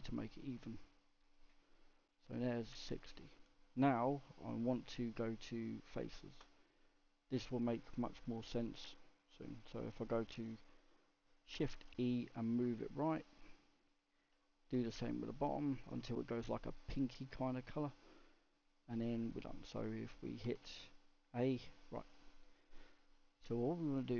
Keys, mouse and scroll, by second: 0.7 click, 1.7 click, 2.1-4.9 middle drag, 4.9 Tab, 7.0 click, 11.8 shift+e, 13.5 middle click, 14.4 click, 14.9 shift+e, 16.2 middle click, 16.6 scroll up 2, 17.4-17.8 scroll down 3, 17.8-20.4 middle drag, 20.4 a, 20.8 a, 21.6 click, 22.1 middle click, 22.9-23.5 scroll up 2, 23.5-24.1 middle drag.